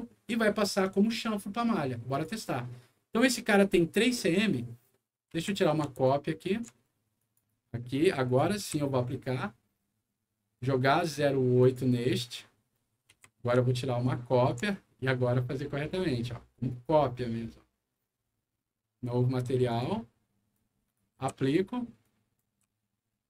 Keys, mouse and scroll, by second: 2.1 click, 4.4 scroll down 1, 4.9 middle click, 5.3 w, 6.0 shift+click, 7.1 shift+click, 7.4 Delete, 7.4 click, 7.9 click, 8.6 a, 11.6 click, 12.7 middle click, 13.0 w, 14.0 shift+click, 15.9 shift+click, 16.6 shift+click, 17.3 shift+middle click, 19.0 click, 19.6 click, 20.5 click, 21.1 a, 22.0 click.